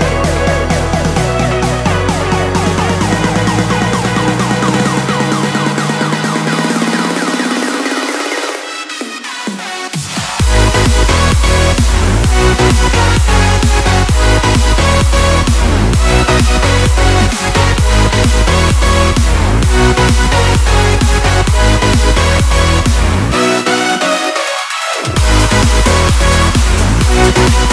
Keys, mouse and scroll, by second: 2.1 Return, 2.6-5.4 drag, 6.5 b, 7.5 click, 15.3 click, 21.1 v, 21.6-22.4 alt+scroll up 2, 22.4-23.2 typing, 23.8 click, 27.6-27.7 typing.